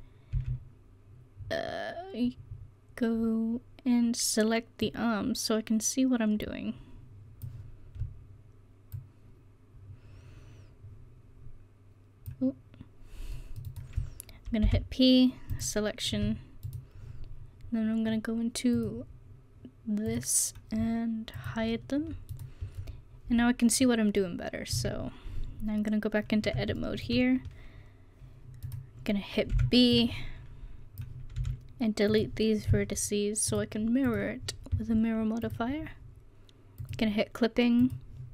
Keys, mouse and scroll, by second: 0.4 c, 13.8-15.6 drag, 14.7 p, 16.2 Tab, 16.7-17.9 drag, 18.8-22.3 drag, 22.3-23.8 middle drag, 23.8-24.8 drag, 24.8 Tab, 29.6 b, 31.4 x, 33.5-34.1 drag, 36.0-37.8 middle drag.